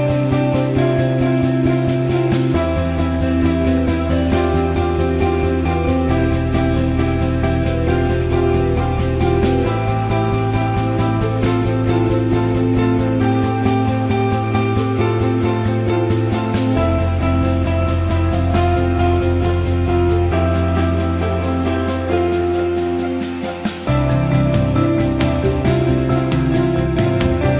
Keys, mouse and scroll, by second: 0.0 middle click, 1.1 middle click, 1.5 middle click, 1.7 middle click, 2.4 middle click, 2.6 middle click, 3.0 middle click, 3.3 middle click.